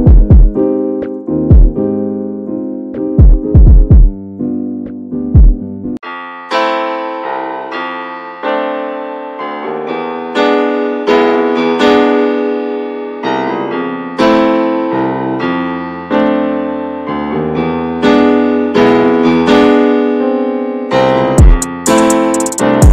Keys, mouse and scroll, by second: 0.2-0.5 scroll up 1, 0.5 shift+middle click, 1.1 shift+d, 2.0-3.8 shift+middle drag, 3.8-5.1 drag, 6.1 click, 7.0 click, 11.0-13.6 drag, 13.6-13.9 scroll down 1, 13.9 middle click, 14.2-14.7 scroll down 1, 14.7 alt+middle click, 15.1-15.9 alt+scroll up 3, 15.9 shift+middle drag, 16.2-17.1 shift+scroll up 4, 17.1 shift+middle click, 17.8 scroll up 2, 18.0-18.4 shift+middle drag, 18.4-19.4 scroll down 6, 19.4-20.0 scroll down 2, 20.1 click.